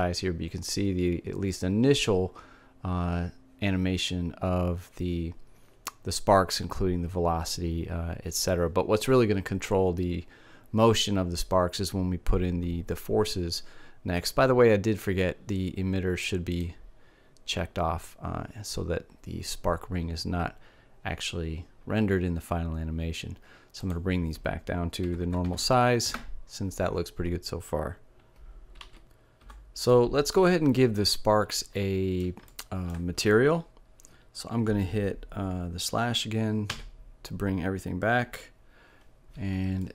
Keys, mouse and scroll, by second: 16.1-18.0 drag, 23.4-24.5 drag, 28.4 alt+a, 31.4 middle click, 37.8 KP_Divide.